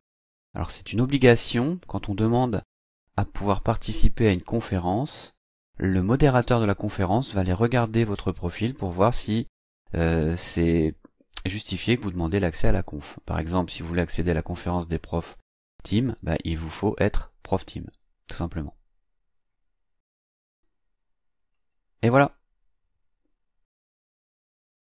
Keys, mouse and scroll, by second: 4.2-5.9 drag, 21.4 click.